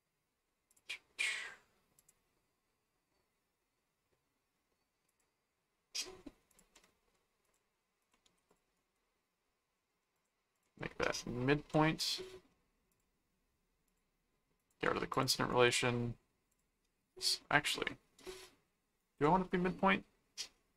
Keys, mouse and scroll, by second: 0.7 click, 2.0 click, 5.1 click, 6.5 click, 7.4 ctrl+click, 8.1 ctrl+alt+click, 8.2 ctrl+alt+a, 8.7 right click, 10.1 ctrl+click, 12.9 click, 13.8 click, 14.6 click, 15.5 right click, 16.5 click, 19.0 right click.